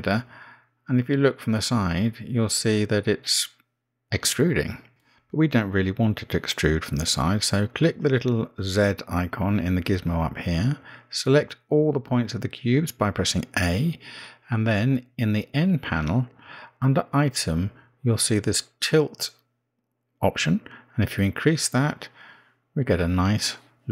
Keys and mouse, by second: 2.0-3.4 middle drag, 5.3-7.5 drag, 14.9 a, 17.6-21.0 drag, 21.6-23.9 drag.